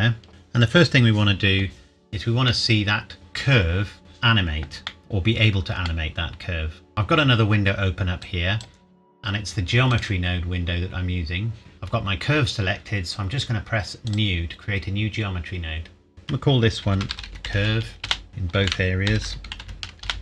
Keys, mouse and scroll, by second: 0.3 ctrl+s, 2.7 middle click, 4.0 scroll up 1, 4.9 middle click, 8.2 click, 14.1 click, 16.8-17.6 typing, 18.1 Return, 18.3 click, 18.6-19.6 typing, 20.1 Return.